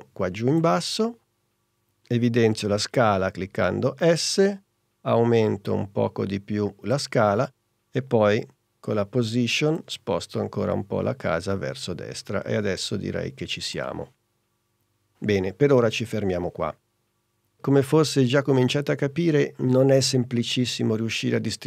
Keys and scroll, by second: 3.6 s, 8.7 p.